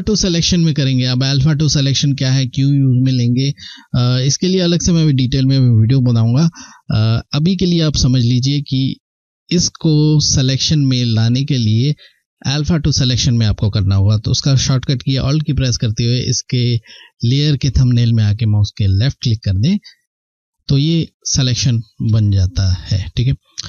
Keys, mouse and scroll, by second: 0.1-0.4 scroll, 0.4 ctrl+scroll down 1, 0.8 scroll up 2, 16.3 alt+Num_Lock, 18.8 alt+click, 19.0 click, 19.1 alt+click, 21.0 ctrl+scroll up 1, 21.5 ctrl+scroll down 1.